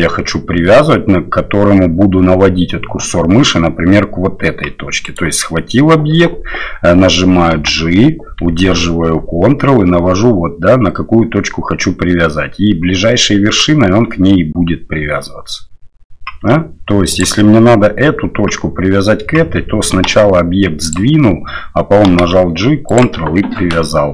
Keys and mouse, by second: 5.1 right click, 7.5 g, 20.0 g, 22.1 g.